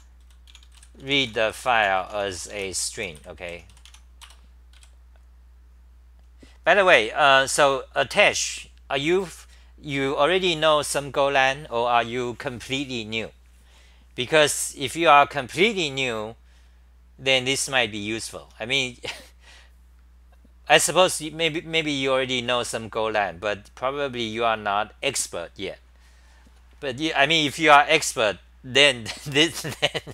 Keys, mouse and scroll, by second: 3.9 Home, 4.2 Return, 4.7 ;, 6.9 Home, 17.9 c, 18.4 t.